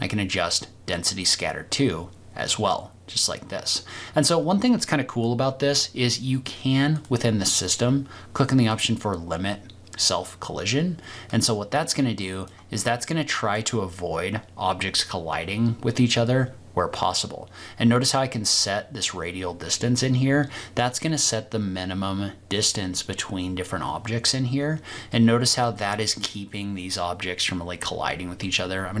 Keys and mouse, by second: 11.4-12.5 drag, 12.8-13.6 middle drag, 17.1-24.2 drag, 25.1-25.8 middle drag, 28.4 middle drag, 28.6-29.0 drag.